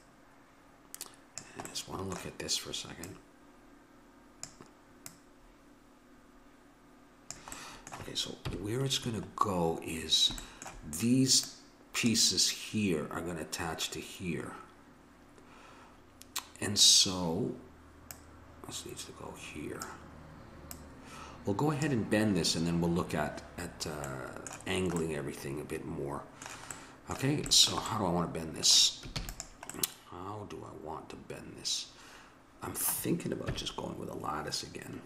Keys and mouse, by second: 1.7 middle click, 3.1-6.8 drag, 3.1 middle click, 7.6 middle click, 8.5 KP_1, 11.5-13.3 drag, 18.1-19.8 drag, 20.7-22.5 drag, 24.0-25.5 middle drag, 29.2 ctrl+s, 33.5 KP_1.